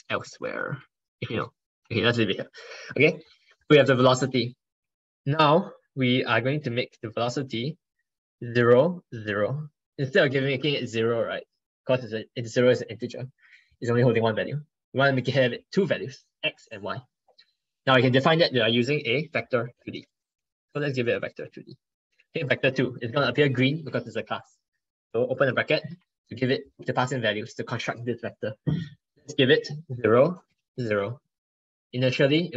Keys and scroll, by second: 0.1 ctrl+Right, 0.3 ctrl+Right, 0.8 Left, 3.3 ctrl+Right, 5.0 ctrl+Left.